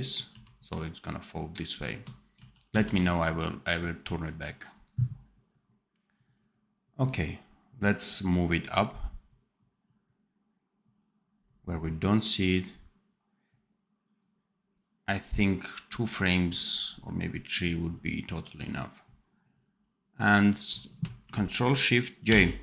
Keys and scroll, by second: 0.2 v, 2.3 ctrl+z, 22.2 ctrl+shift+j.